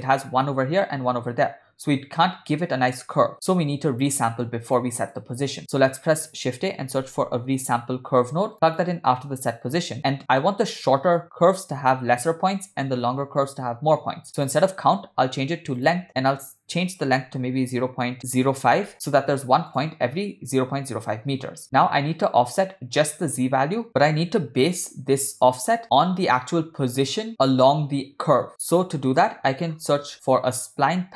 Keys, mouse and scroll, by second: 3.7 click, 4.5-4.8 drag, 5.2-5.5 drag, 5.6 shift+a, 9.6-10.0 drag, 14.4-16.0 drag, 16.5-18.9 drag, 17.8 BackSpace, 18.0 BackSpace, 19.8 drag, 22.6-24.7 drag, 25.2-27.2 drag, 28.5 click, 30.2 shift+a.